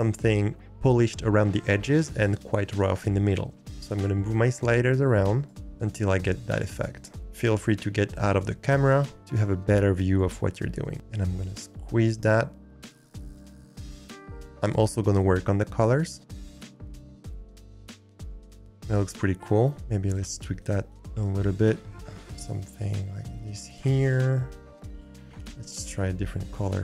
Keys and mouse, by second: 3.7 click, 4.5-5.5 drag, 5.5-6.6 middle drag, 7.5-10.9 shift+middle drag, 12.1 click, 12.3-13.1 middle drag, 15.2-16.2 drag, 22.3 drag, 22.8 click.